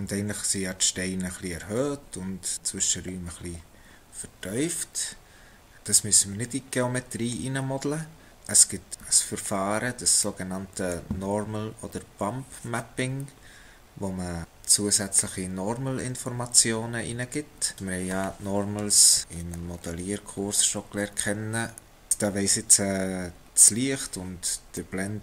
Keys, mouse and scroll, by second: 5.7 middle click, 6.1-6.5 scroll up 1, 8.6 middle click, 10.1 scroll down 1, 10.3 middle click, 17.7 click, 23.5-24.7 scroll down 1, 24.7 middle click.